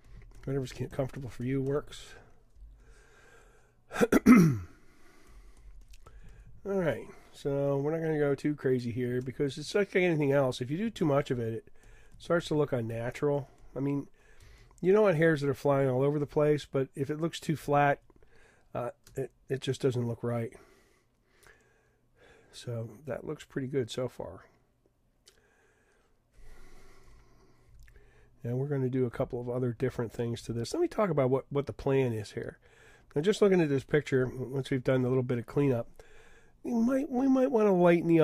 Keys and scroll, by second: 27.7 super+=, 29.1 super+-, 30.1 super+-, 30.7 super+-, 34.2 super+-.